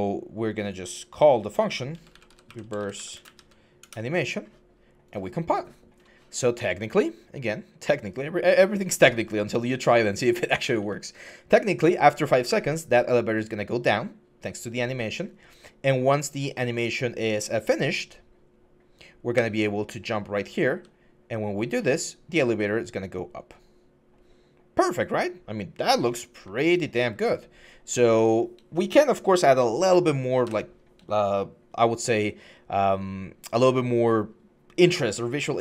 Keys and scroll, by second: 1.7-3.1 typing, 3.6 Return, 10.0-12.7 typing, 19.1-21.4 typing, 26.2-27.7 typing, 30.2 Escape.